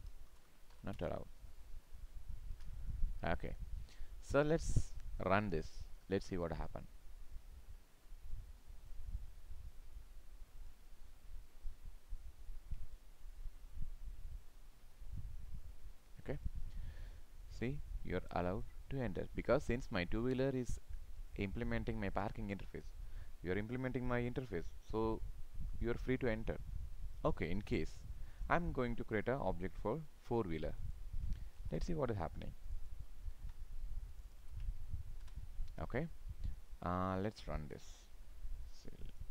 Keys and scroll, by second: 2.6 ctrl+s, 31.6 ctrl+c, 33.4 ctrl+v, 35.3 ctrl+s.